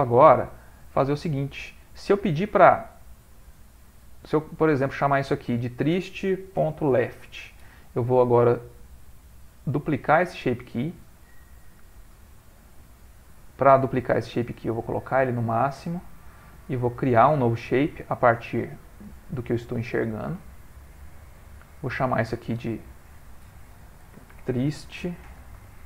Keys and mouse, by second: 0.2 click, 4.3 click, 4.7 click, 6.9 click, 9.9 click, 14.5 click, 17.0 click, 21.8 click, 22.2 click, 25.6 BackSpace.